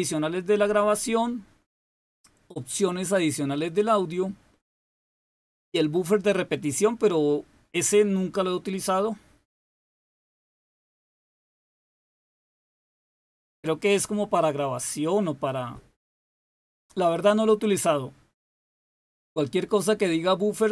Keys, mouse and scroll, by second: 2.6 click, 8.7 click.